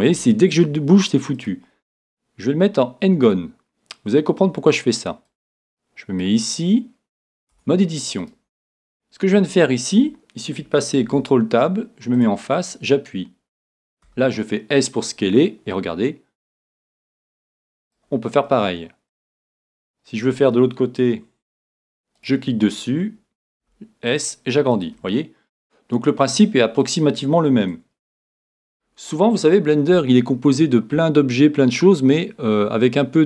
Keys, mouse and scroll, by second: 1.4-3.2 drag, 5.3-7.2 drag, 7.6 Tab, 8.2-10.1 right drag, 11.0 ctrl+Tab, 12.6-14.5 right drag, 14.1 s, 15.5 s, 18.0-19.7 drag, 18.5-19.6 middle drag, 19.7-22.9 middle drag, 22.2-23.8 right drag, 23.6 s, 24.9-26.6 drag, 25.3-28.5 middle drag, 28.5 Tab.